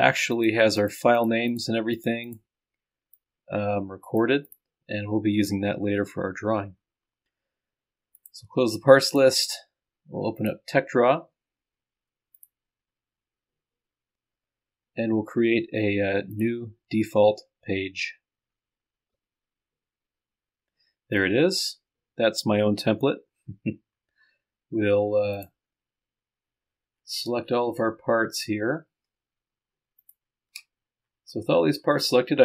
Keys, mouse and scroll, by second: 0.4-1.8 drag, 2.0 click, 3.2-5.1 drag, 5.9-7.3 scroll up 1, 7.3-7.7 scroll up 1, 8.2 click, 16.3-17.8 drag, 25.4 click, 26.4-27.3 scroll down 1, 27.3 scroll up 1, 27.5-29.1 scroll down 1, 29.1 ctrl+shift+scroll down 1, 30.0 ctrl+shift+click, 30.7-31.9 scroll up 1.